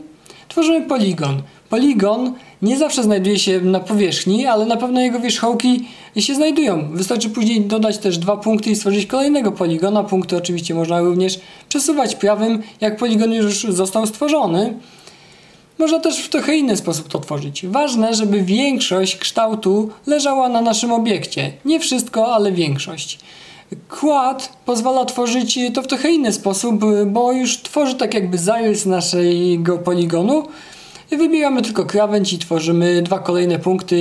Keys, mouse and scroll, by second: 1.0-2.0 right drag, 3.9 click, 5.3 click, 7.1-8.1 right drag, 9.8-12.2 right drag, 13.1-15.1 right drag, 21.7 click, 23.1 click, 24.4 click, 26.3 click, 27.4 click, 28.8 click, 30.1 click, 31.2 Escape.